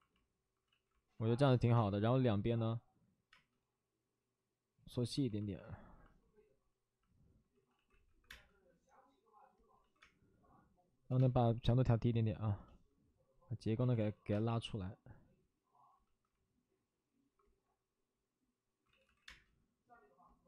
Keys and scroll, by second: 0.6 ctrl+z, 1.7 space, 3.2 space, 7.5 ctrl+z, 7.6 ctrl+z, 8.0 1, 8.2 space, 9.7 ctrl+z, 10.0 space, 13.7 ctrl+z, 13.7 space, 14.2 ctrl+z, 14.2 space, 18.8 ctrl+z, 18.9 ctrl+z, 19.2 space.